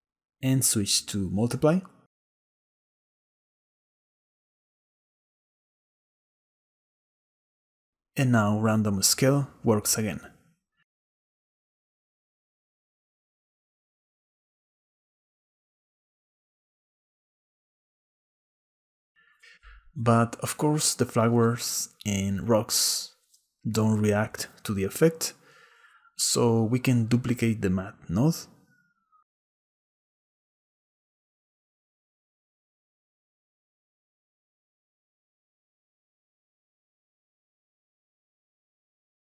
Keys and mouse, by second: 1.6-3.7 drag, 3.7-4.8 middle drag, 5.4 middle click, 7.4-9.5 shift+middle drag, 9.5 shift+click, 10.1 shift+middle click, 18.2 click, 19.7-21.5 drag, 22.9 click, 24.2-25.8 drag, 26.7 click, 28.8 click, 30.3 click, 32.2 click, 34.7 shift+d, 36.5 click, 37.9 click.